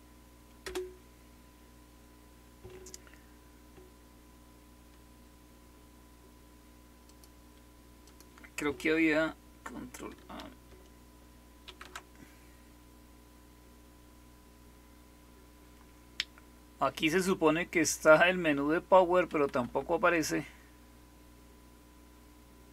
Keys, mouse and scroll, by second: 0.5 Return, 7.0 click, 7.4 click, 11.6 ctrl+alt+p, 19.2 Right, 19.6 Right.